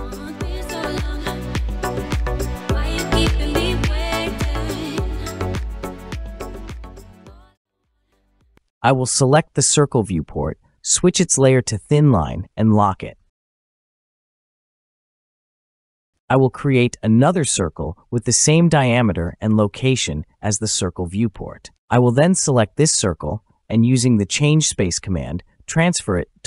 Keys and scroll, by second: 16.1 Escape, 17.3 typing, 18.5 Return, 25.0-26.0 typing.